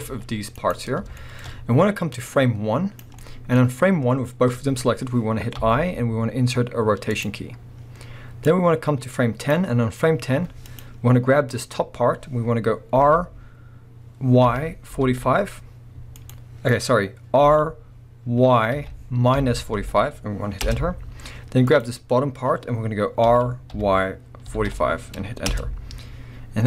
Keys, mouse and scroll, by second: 0.1 g, 0.7 right click, 1.1 shift+scroll up 1, 1.2-2.3 shift+middle drag, 2.3-3.2 drag, 3.2-8.4 middle drag, 8.4-10.8 drag, 13.0 r, 16.3 right click, 17.4 r, 21.7 click, 23.2 r, 25.6 Return, 26.4-26.6 scroll up 1.